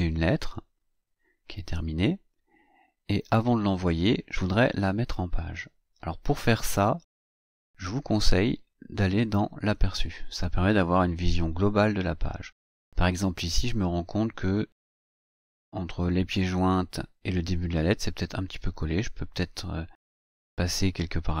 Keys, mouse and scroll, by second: 0.8-2.7 scroll down 4, 2.7-3.4 scroll down 1, 3.4-3.7 scroll up 2, 9.4 click.